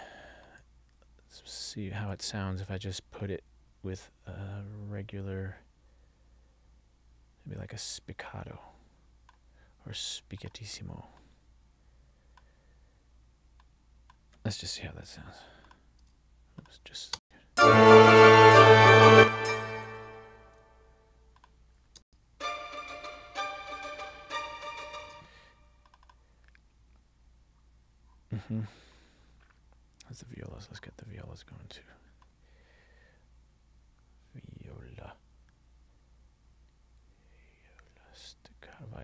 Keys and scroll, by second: 17.3 space, 19.2 space, 22.2 space, 25.2 space.